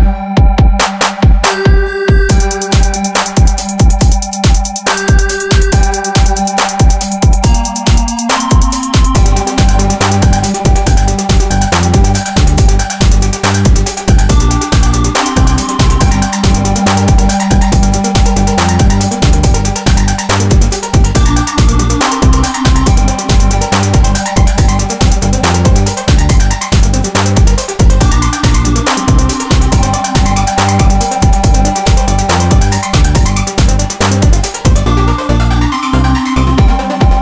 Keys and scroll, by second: 1.4 ctrl+1, 7.3 alt+s, 9.8 alt+s, 11.0 ctrl+3, 11.4 ctrl+1, 11.9 alt+z, 12.5 ctrl++, 13.6 ctrl++, 19.0 Escape, 29.5 Escape, 29.7 alt+z.